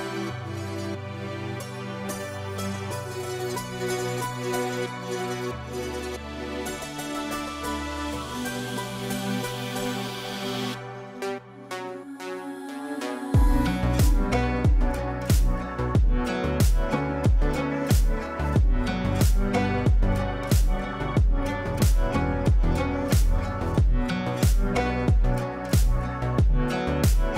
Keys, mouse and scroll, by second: 3.9 space, 4.3 shift+click, 5.0-6.0 typing, 6.0 click, 7.0 F3, 9.5-11.3 drag, 14.1 click, 18.3 shift+c, 19.7 Caps_Lock, 20.8 shift+x, 21.1 o, 22.3-25.6 typing, 26.6 ctrl+space.